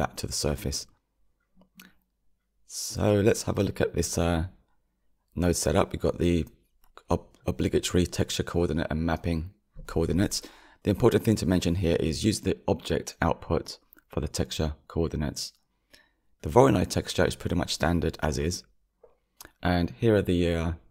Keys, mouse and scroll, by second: 5.0 click, 9.7 click, 11.1-12.4 drag, 16.8-20.9 drag.